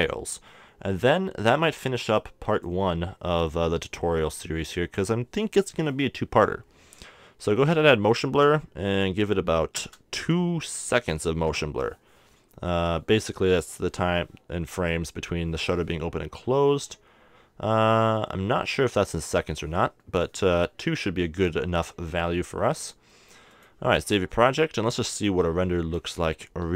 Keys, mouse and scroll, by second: 2.0-4.4 drag, 4.8-7.6 middle drag, 7.6-9.4 drag, 19.9-22.8 middle drag, 22.8-24.8 drag, 25.1 middle click.